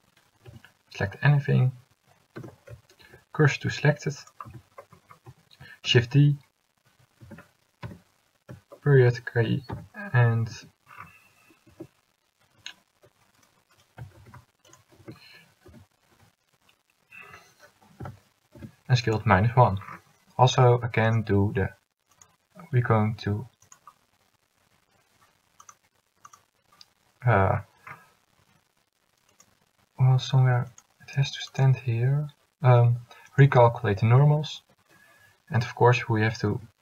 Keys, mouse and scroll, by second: 0.6 a, 2.5 Tab, 3.1 shift+s, 4.6 Tab, 5.9 shift+d, 7.9 ., 9.5 s, 11.0 click, 11.8 Tab, 14.3 shift+s, 15.1 Tab, 15.8 s, 36.1 a, 36.7 a.